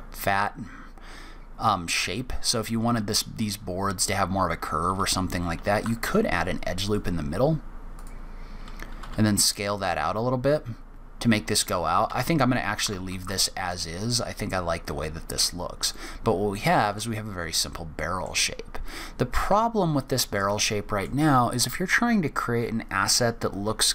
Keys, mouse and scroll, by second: 6.0 ctrl+r, 9.0 s, 13.2 ctrl+z, 13.7 middle click, 14.5-15.2 scroll up 2, 15.2-15.8 scroll down 1, 15.8 scroll down 1, 15.9 shift+middle click, 17.1 middle click, 18.4-18.9 scroll up 1, 19.0-19.4 scroll down 1, 19.5 shift+middle click, 20.6 middle click, 22.3 scroll up 1.